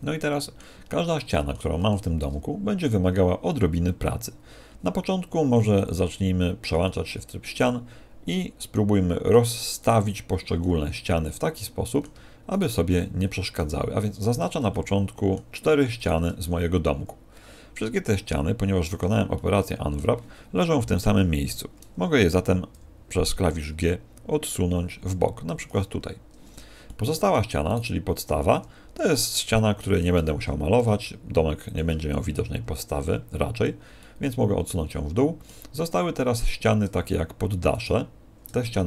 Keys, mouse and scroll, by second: 1.1 middle click, 1.8 ctrl+Tab, 6.8 middle click, 9.8 right click, 11.2 middle click, 12.5 shift+right click, 12.9 middle click, 14.2 shift+right click, 14.6 middle click, 16.0 shift+right click, 16.4 middle click, 19.3 middle click, 19.3-20.1 scroll up 1, 25.5 ctrl+click, 26.8 middle click, 27.6 right click, 29.0-29.5 scroll down 1, 29.5 shift+middle click, 29.5 scroll down 4, 30.3 g, 31.7 ctrl+click, 34.0 middle click, 36.3 right click, 37.7 shift+right click, 38.6 middle click.